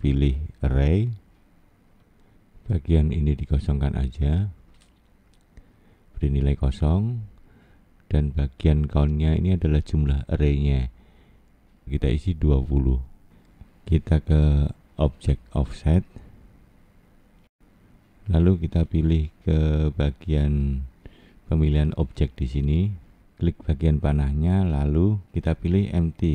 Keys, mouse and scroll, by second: 0.9 scroll down 2, 5.7 click, 10.4 click, 23.9 click, 25.2 click.